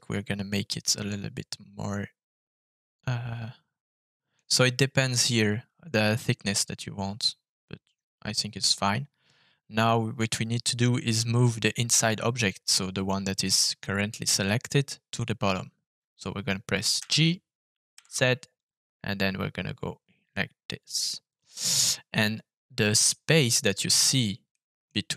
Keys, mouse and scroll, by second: 0.6-2.1 middle drag, 2.7-4.3 shift+middle drag, 7.2-8.6 middle drag, 17.6 g, 18.4 z, 21.4 click, 21.8-22.9 middle drag, 24.5 middle click.